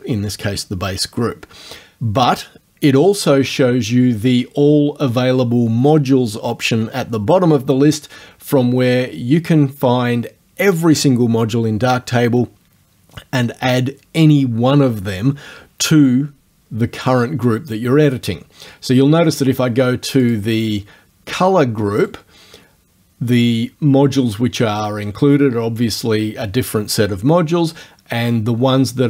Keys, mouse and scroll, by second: 20.3 click, 22.0 right click.